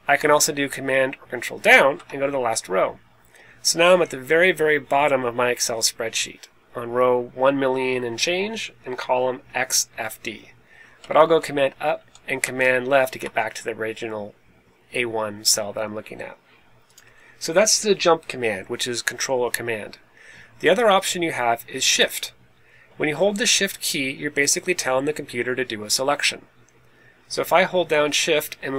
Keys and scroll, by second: 1.6 super+Down, 10.9 super+Up, 11.9 super+Up, 12.3 super+Left.